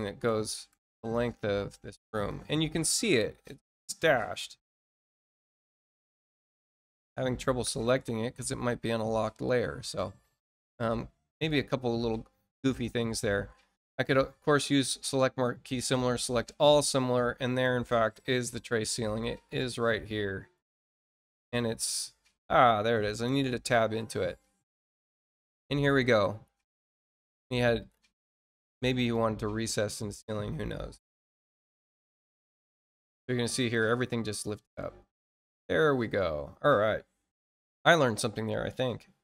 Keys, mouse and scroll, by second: 2.1 click, 2.7-3.0 scroll up 1, 3.2 scroll up 1, 6.1 click, 7.8-8.5 scroll down 2, 9.4 middle click, 9.4 scroll down 2, 9.9 middle click, 11.2 click, 14.4 click, 15.6 click, 16.7 middle click, 16.7-17.1 scroll up 2, 18.1 click, 27.1 click, 28.9 click, 31.0 click, 34.8 middle click, 35.6 middle click, 35.6 scroll up 2.